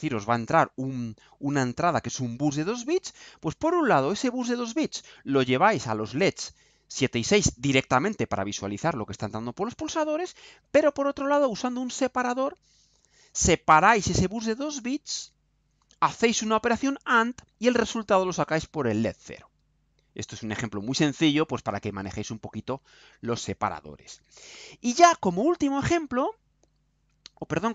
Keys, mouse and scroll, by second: 21.7 scroll down 2.